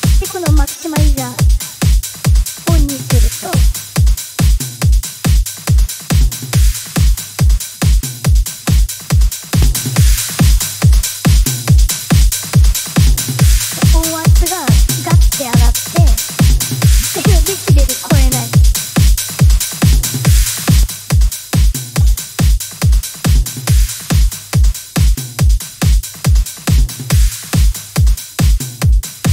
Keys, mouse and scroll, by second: 1.1 middle click, 2.0 click, 3.3 click, 5.0-6.2 drag, 6.8 click, 9.4 click, 20.7 click, 23.9-25.2 drag, 25.8-27.2 drag, 28.5 click.